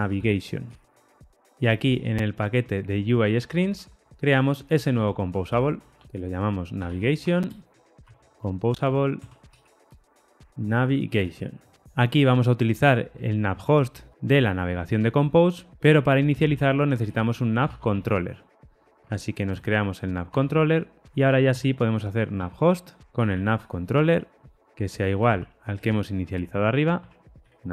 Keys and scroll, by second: 3.7 super+n, 9.9 Return, 12.9 ctrl+alt+o, 14.1 Escape, 19.0 Tab, 20.2 Tab, 22.9 Return, 24.4 Return, 25.6 Escape, 26.6 Escape.